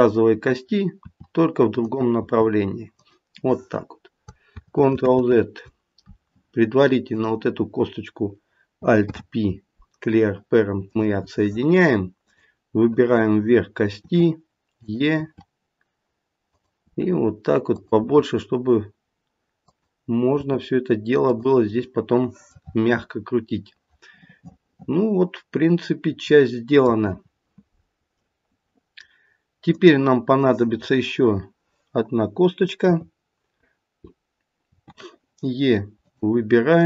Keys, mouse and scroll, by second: 1.0 e, 4.4 ctrl+z, 4.9 ctrl+z, 7.0 click, 9.0 alt+p, 12.3 click, 14.0 e, 15.1 e, 18.0 e, 20.3 e, 22.5 middle click, 28.1 middle click, 28.4 middle click, 29.7 click, 32.8 KP_3, 34.6 e, 36.7 click.